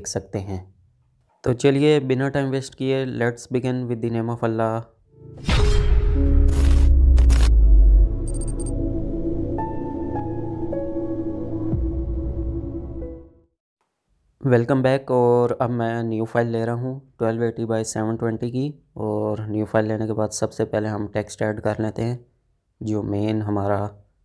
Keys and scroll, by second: 13.6 ctrl+n.